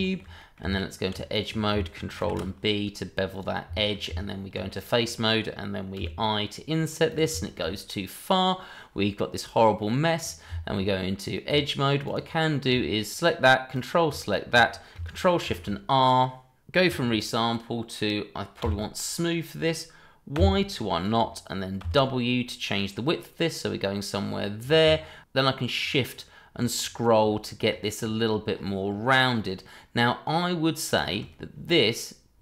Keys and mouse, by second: 0.0 shift+middle drag, 0.4 middle click, 0.6 Tab, 1.3 click, 2.2 ctrl+b, 3.7 shift+middle drag, 4.1 Tab, 4.7 click, 5.0 middle drag, 5.9 i, 7.4 shift+middle click, 9.8 middle click, 10.5 Tab, 12.0 click, 13.7 ctrl+click, 15.4 ctrl+shift+r, 18.6 s, 20.3 y, 21.8 w, 30.9 shift+click.